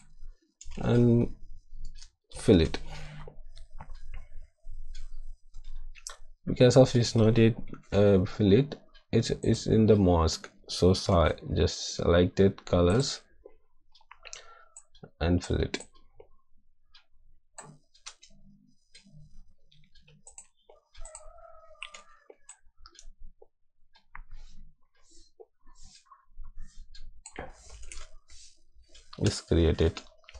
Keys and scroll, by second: 1.8 shift+F5, 2.5 Return, 7.6 ctrl+d, 11.1 b, 18.0 ctrl+z, 21.9 x, 27.7 ctrl+d.